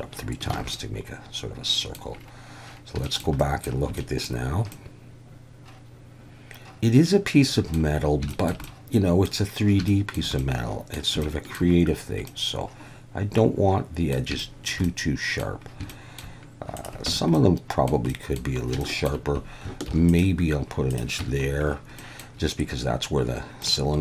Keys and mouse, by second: 0.5 alt+a, 0.7-1.9 drag, 3.0 shift+click, 3.4 drag, 3.9-4.2 shift+drag, 4.7-7.7 middle drag, 8.3 shift+middle click, 8.6-9.2 middle drag, 9.9 shift+middle drag, 10.4-10.9 middle drag, 11.2-11.5 shift+middle drag, 12.2-14.1 middle drag, 14.4 shift+middle drag, 14.9-15.4 middle drag, 15.9 shift+middle drag, 17.1 Tab, 17.4-17.9 middle drag, 18.1 middle drag, 18.8 shift+middle click, 19.9 ctrl+r, 20.9 click, 21.2 Tab, 22.0 middle click, 23.6-24.0 middle drag.